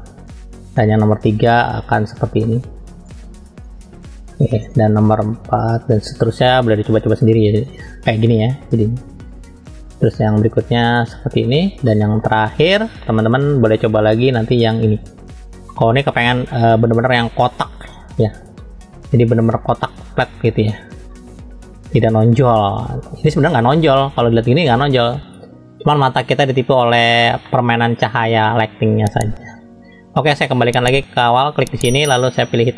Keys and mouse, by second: 0.7-1.8 drag, 2.4 shift+middle click, 3.0 click, 4.7-5.9 drag, 6.2 shift+middle click, 7.1 click, 9.3-10.6 drag, 11.0 click, 11.8 shift+middle click, 12.7 shift+middle click, 14.3-15.4 drag, 15.7 shift+middle click, 16.7 shift+middle click, 17.6 click, 18.6 middle click, 20.3 click, 21.1-23.0 middle drag, 23.6-26.1 middle drag, 26.8 middle click, 27.4 shift+middle click.